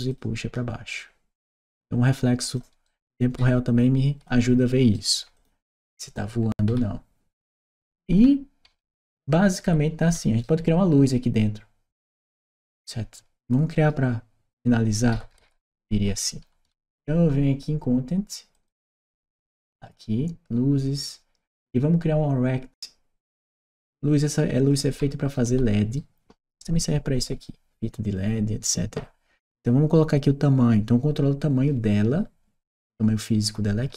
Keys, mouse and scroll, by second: 0.7-2.4 ctrl+drag, 2.7-4.7 ctrl+right drag, 5.2 ctrl+click, 6.2-11.1 ctrl+right drag, 9.5 w, 9.9 d, 13.8-16.5 right drag, 15.0 w, 16.5 s, 18.4 click, 19.2 click, 23.5-24.6 drag, 24.7-25.8 right drag.